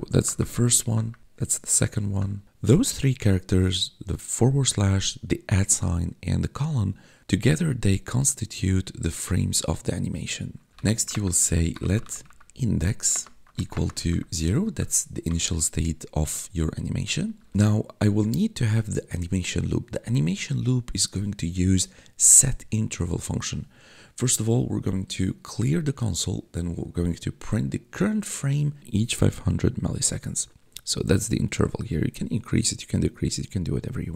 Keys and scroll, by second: 0.3 `, 0.8 ,, 1.2 `, 2.1 ,, 10.7-14.6 typing, 15.1 Return.